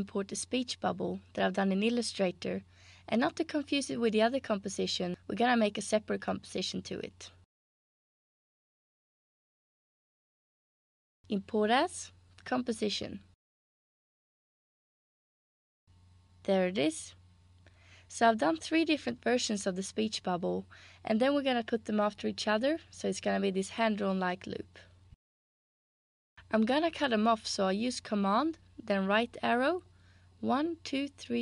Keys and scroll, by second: 30.2 super+Right, 30.8 super+Right, 31.1 super+Right.